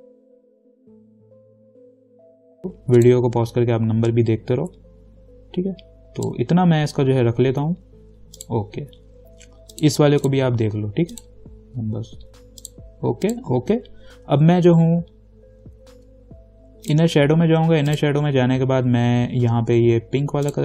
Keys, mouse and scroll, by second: 17.1 click.